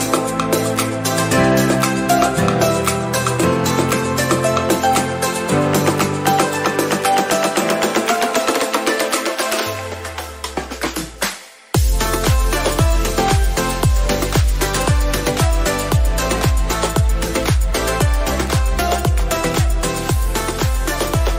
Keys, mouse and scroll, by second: 2.0 ctrl+=, 2.6 ctrl+=, 2.7 scroll up 1, 6.6-9.4 drag, 9.4 ctrl+-, 12.9-15.0 scroll down 1, 15.0 click, 18.0 ctrl+t, 18.7-21.3 drag.